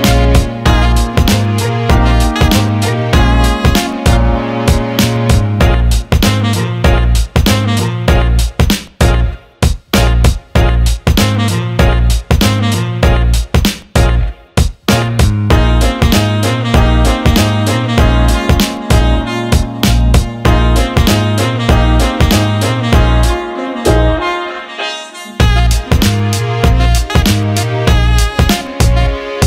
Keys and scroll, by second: 7.8 Delete, 18.2 ctrl+z.